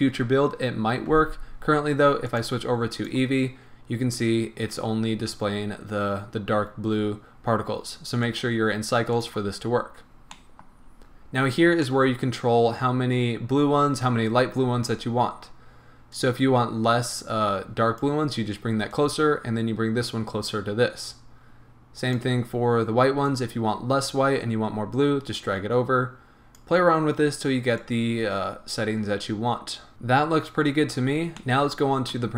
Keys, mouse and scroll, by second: 2.3-10.4 drag, 10.4-16.1 middle drag, 10.9-11.9 scroll up 2, 12.2-13.7 scroll up 2, 13.7-16.1 scroll up 1, 16.1-31.4 drag, 30.7 scroll down 1, 31.4-32.3 middle drag.